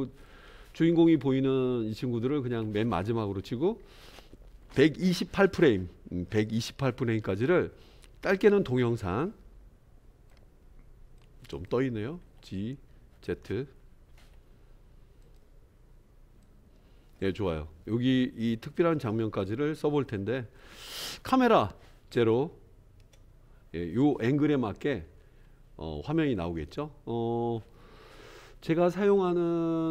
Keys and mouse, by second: 7.6-10.4 drag, 11.2-11.7 drag, 12.2 g, 16.5-20.7 drag, 22.1 KP_0, 23.0 KP_0.